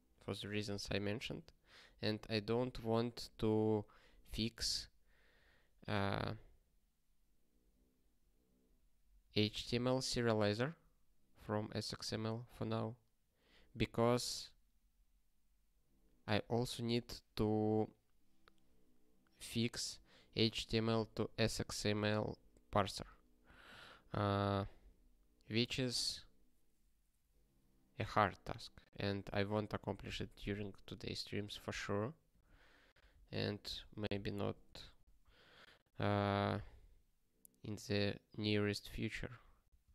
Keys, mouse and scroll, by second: 32.3 scroll down 1, 36.4 click, 36.9 ctrl+n, 37.1 ctrl+a, 37.2 ctrl+space, 37.6 ctrl+e, 37.9 alt+;, 38.3 ctrl+s, 38.7 ctrl+n.